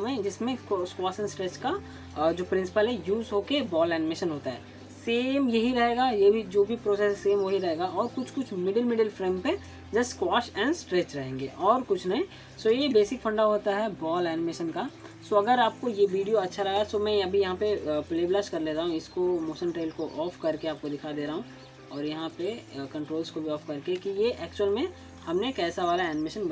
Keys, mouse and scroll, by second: 20.6 click.